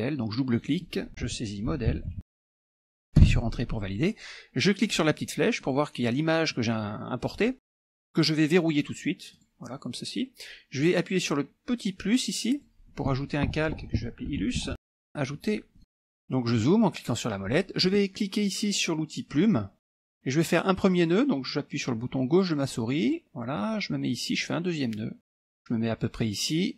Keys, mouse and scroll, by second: 0.6 click, 1.5-2.8 typing, 3.3 Return, 4.8 click, 5.6 click, 9.4 click, 12.6 click, 14.2-15.2 typing, 15.8 click, 16.0-17.2 scroll down 2, 19.9 click, 23.1 click, 25.4 click.